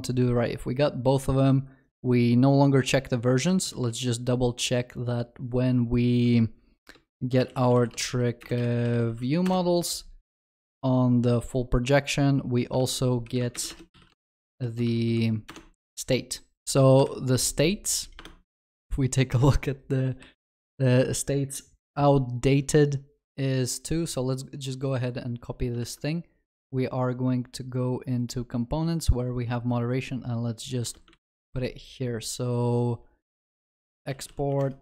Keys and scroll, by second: 3.7 ctrl+shift+n, 12.8 ctrl+d, 13.6 ctrl+BackSpace, 15.5 Return, 16.6 ctrl+s, 17.0 ctrl+b, 25.8 ctrl+c, 31.1 ctrl+v, 33.4 ctrl+BackSpace.